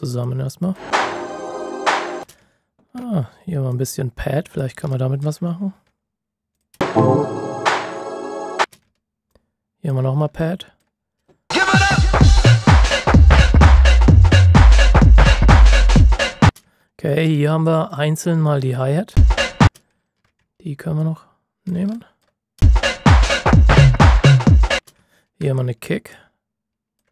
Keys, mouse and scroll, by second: 2.1 space, 2.4 ctrl+scroll up 1, 3.7 ctrl+click, 4.9 alt+click, 5.4-6.5 ctrl+shift+scroll down 2, 6.5 click, 6.7 space, 9.3 ctrl+click, 10.3 alt+click, 11.5-11.8 ctrl+shift+scroll up 1, 13.2 ctrl+shift+scroll down 1, 13.5 ctrl+shift+scroll up 1, 15.4-15.8 ctrl+shift+scroll down 1, 16.4 space, 16.7 ctrl+shift+scroll up 1, 17.2-17.8 scroll up 1, 17.8 click, 18.5 ctrl+shift+scroll up 1, 19.1 space, 20.0 ctrl+shift+scroll up 1, 20.9 ctrl+click, 21.9 alt+click, 22.5 space, 22.9 ctrl+shift+scroll down 1, 23.8-24.1 ctrl+shift+scroll up 1, 24.7 space, 25.0 ctrl+shift+scroll up 1, 26.1 ctrl+click.